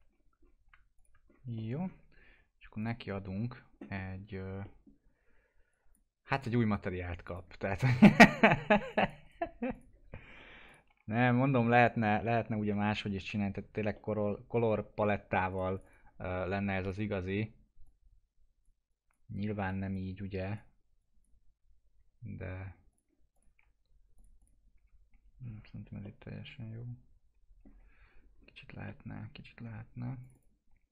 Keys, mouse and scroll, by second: 0.1-0.4 scroll up 1, 0.9 ctrl+click, 1.3-2.2 scroll down 2, 1.5 middle click, 2.8 click, 3.9 middle click, 5.7 click, 6.6 right click, 7.2 click, 7.9-8.9 scroll up 1, 8.9 click, 9.2 right click, 9.7 click, 10.9 F4, 11.5 middle click, 11.8 scroll down 1, 12.7 alt+middle click, 13.2 p, 13.5-13.9 scroll down 1, 13.9 middle click, 15.5 click, 24.7 F4, 25.4-25.9 scroll down 1, 26.0-28.4 alt+middle drag, 28.4-28.8 scroll up 1, 28.8 middle click, 30.2 click.